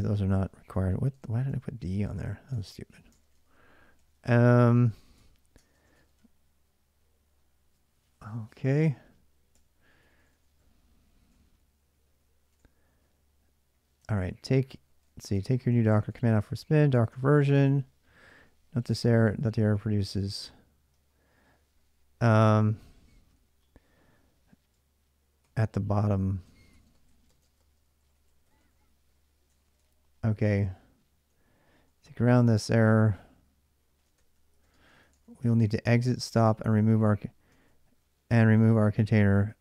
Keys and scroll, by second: 0.0-6.7 typing, 5.4 ctrl+[, 9.3-28.5 typing, 29.4 ctrl+[, 29.4 ctrl+j, 30.5-39.6 typing.